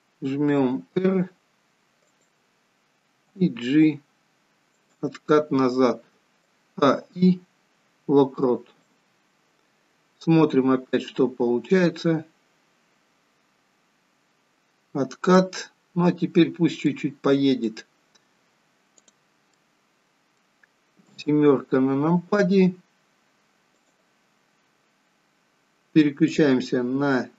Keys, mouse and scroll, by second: 0.7 r, 3.1 g, 6.5 a, 6.9 i, 11.5 click, 15.7 scroll down 4, 16.4 scroll down 1, 16.8 middle click, 17.7-18.9 scroll down 2, 18.9 click, 19.6 middle click, 21.1 KP_7, 23.7 click, 26.4 click.